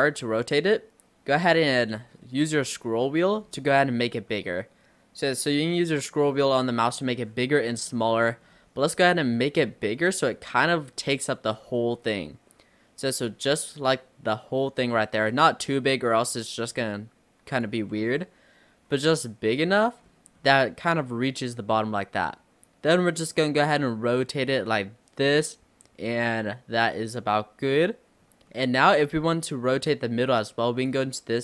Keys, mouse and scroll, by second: 18.0 ctrl+z, 19.0 r, 28.2 scroll up 1, 28.5-30.9 middle drag, 30.9 click.